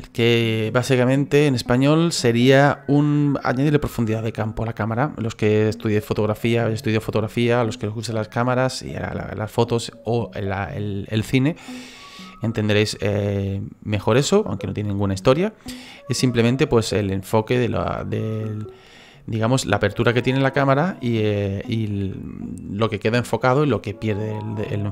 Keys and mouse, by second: 13.0 shift+middle click, 16.9 shift+middle click, 18.1 shift+middle click.